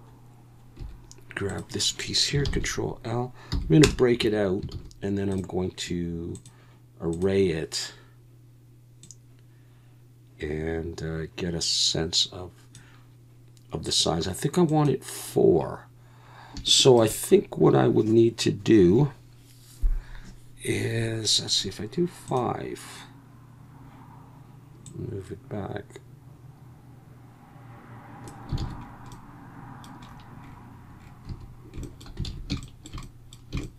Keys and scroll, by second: 0.8 3, 2.4 ctrl+l, 3.5 p, 4.2 Tab, 4.7 alt+a, 28.6 alt+a, 31.3 a, 32.3 alt+a.